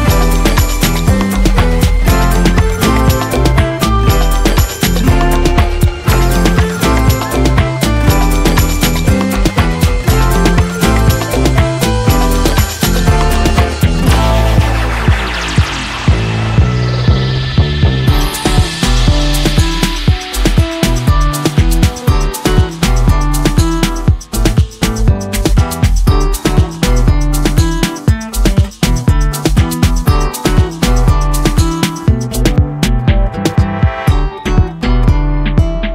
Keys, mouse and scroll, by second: 0.0-1.3 typing, 1.9-2.8 drag, 7.0-8.3 drag, 11.9 right click, 12.5 click, 13.4 right click, 15.7 click, 18.0 right click, 18.5 click, 19.3 ], 19.6 ], 20.2-21.4 drag, 26.8 ctrl+z, 28.4-31.4 drag.